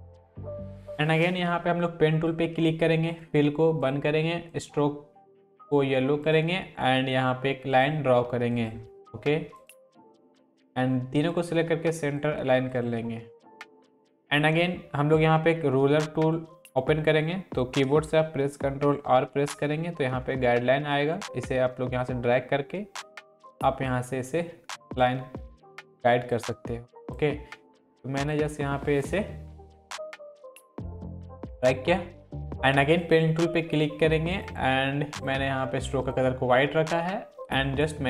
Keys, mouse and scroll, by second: 1.3-2.5 drag, 8.5-12.0 shift+drag, 10.9-11.6 drag, 18.8 ctrl+r, 20.9-24.1 drag, 33.0 click.